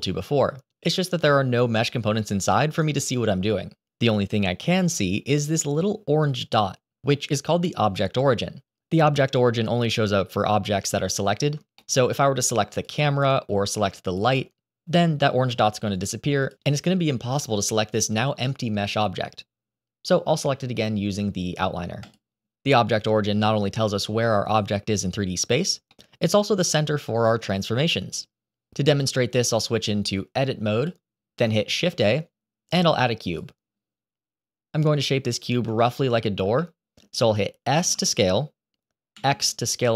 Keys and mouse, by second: 11.7 shift+middle drag, 12.6 click, 13.9 click, 16.3 click, 16.8 click, 17.2 click, 17.5 click, 18.3 click, 18.7 click, 19.2 click, 21.9 click, 25.8-27.3 middle drag, 29.8-30.8 drag, 31.7 shift+a, 35.8 shift+middle click, 36.5 middle click, 37.6 s.